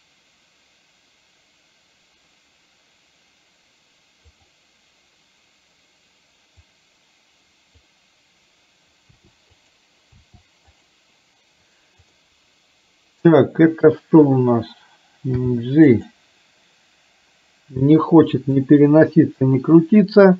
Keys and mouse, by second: 4.3 click, 6.9 click, 9.3 r, 10.1 r, 12.3-14.3 drag, 15.4 g, 18.6-20.3 drag.